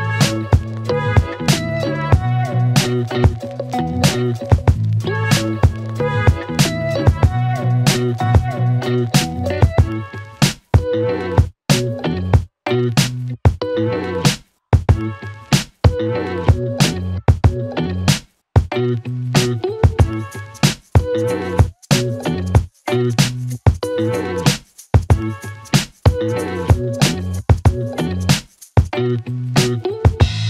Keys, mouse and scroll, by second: 2.2 click, 5.8 click, 8.1 click, 9.5 click, 13.4 click, 15.5 click, 19.7-20.8 click, 23.0-23.7 click.